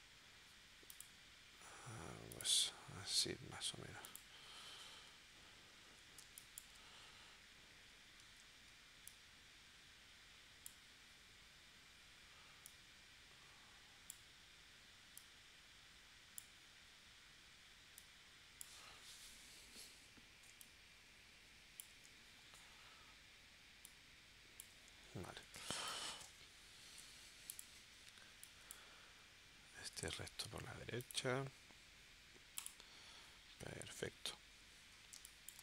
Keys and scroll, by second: 6.2 space, 8.2 shift+w, 25.6 space, 27.0 v, 29.8 super+z, 35.1 space.